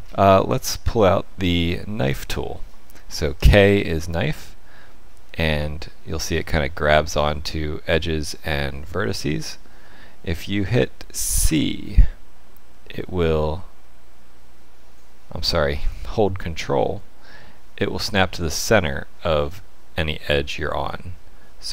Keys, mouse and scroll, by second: 0.0 ctrl+z, 0.0-0.6 scroll up 5, 0.6 shift+middle click, 3.3 k.